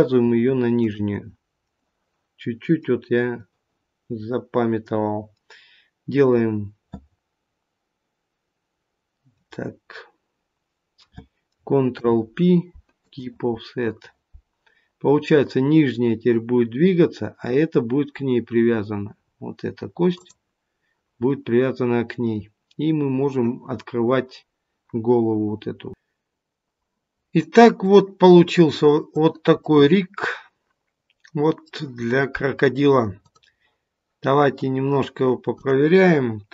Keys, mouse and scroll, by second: 0.7 shift+click, 11.8 ctrl+p, 19.1-20.1 scroll up 1, 20.1 click, 20.1-20.5 scroll up 1, 21.9-22.3 scroll down 1, 22.7-23.1 scroll down 1.